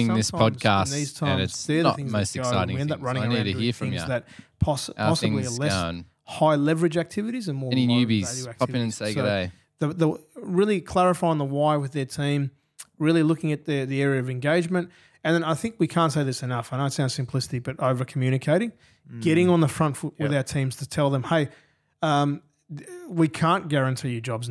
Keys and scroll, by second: 1.9 super+].